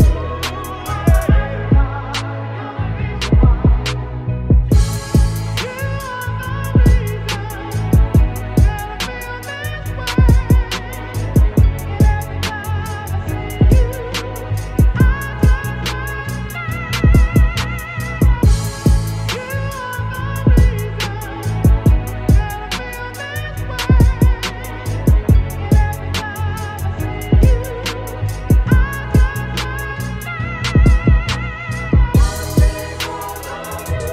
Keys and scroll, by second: 6.0 Delete, 10.9 [, 11.9 shift+z, 12.7 ctrl+z, 20.6 b, 22.0 ctrl+shift+z, 23.7 ctrl+z, 26.5 space, 34.0 b.